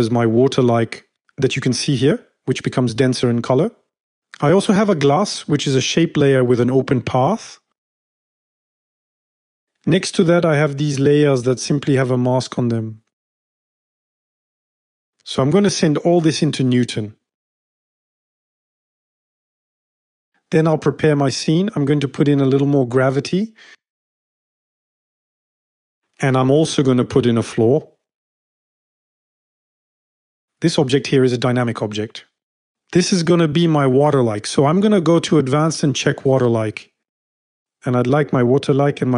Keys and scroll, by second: 14.4 shift+@, 16.8 F5, 21.8-22.8 typing.